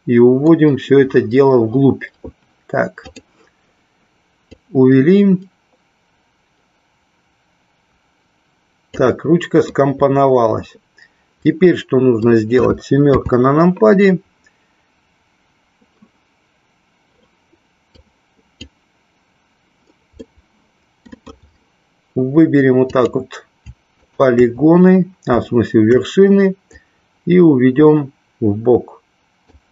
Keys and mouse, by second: 4.5-8.9 drag, 9.7-12.3 middle drag, 13.0 KP_7, 17.9 click, 20.2-21.3 middle drag, 23.9 shift+click, 26.8-29.4 drag.